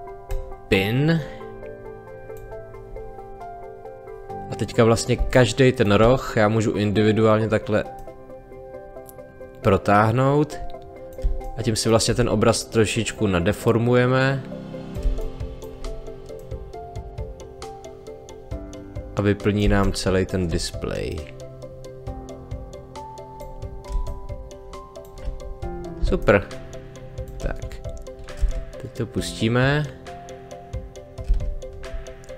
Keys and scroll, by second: 5.2 space, 11.2 space, 15.0 space, 19.6 space, 23.9 space, 31.2 space.